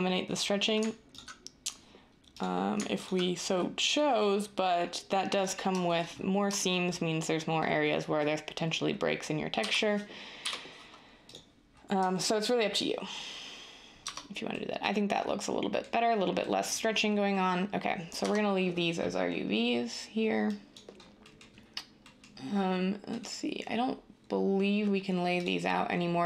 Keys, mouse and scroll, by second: 9.5-10.4 typing, 14.0 Tab, 18.1 Tab.